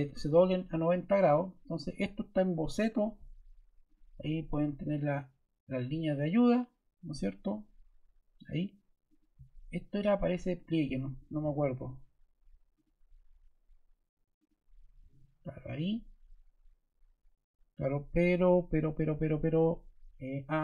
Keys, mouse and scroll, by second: 9.0 click, 10.5 click, 14.3 click.